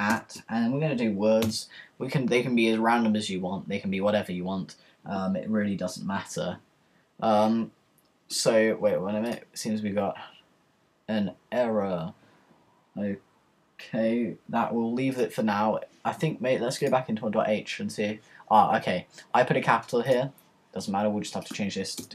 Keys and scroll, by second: 0.0-1.9 typing.